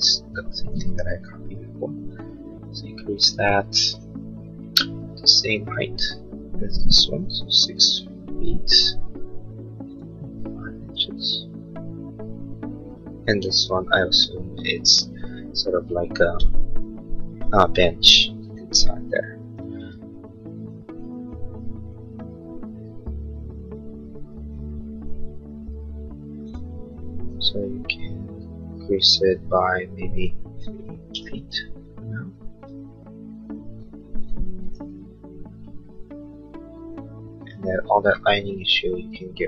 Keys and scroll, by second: 0.9 p, 30.4-31.3 typing, 31.3 Return, 34.5-35.3 typing.